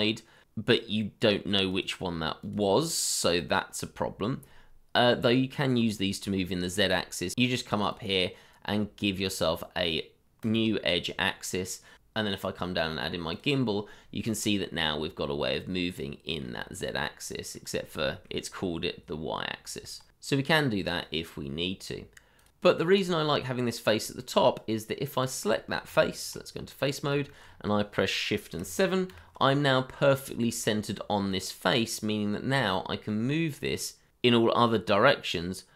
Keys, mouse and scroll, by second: 3.4 middle click, 5.7-7.3 scroll up 1, 14.0 scroll down 1, 14.7 middle click, 16.4-16.7 scroll up 1, 16.9-17.3 scroll down 1, 17.7 scroll up 1, 20.0 scroll down 1, 24.6 middle click, 25.2 shift+middle click, 26.4 Tab, 27.4 shift+middle click, 27.4-28.6 shift+scroll up 2, 29.1 shift+Home, 30.5 shift+middle click, 31.0-31.4 scroll up 1, 31.4-31.8 scroll down 1, 31.9 shift+middle click, 32.4 scroll down 1, 33.2-33.7 scroll up 1, 34.3-35.7 scroll down 1.